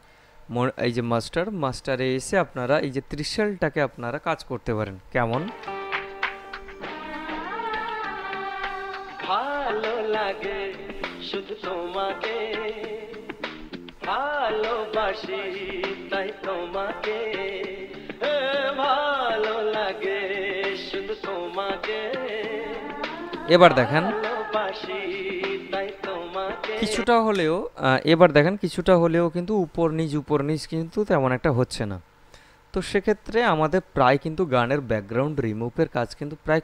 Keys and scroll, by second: 5.5 space, 27.2 space.